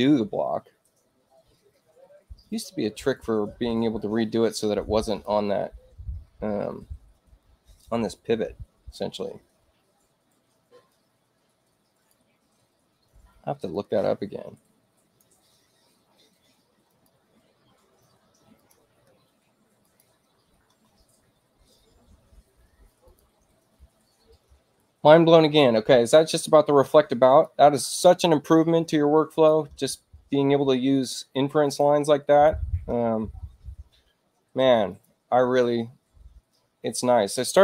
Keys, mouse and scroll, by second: 2.4 click, 4.4 space, 5.0 click, 10.8-12.0 drag, 13.6-15.1 drag, 16.8 click, 18.5 click, 19.7 ctrl+click, 23.0 click, 27.2 click, 28.3 space, 29.2 click, 30.4 space, 31.6 click, 32.2 click, 34.8 click.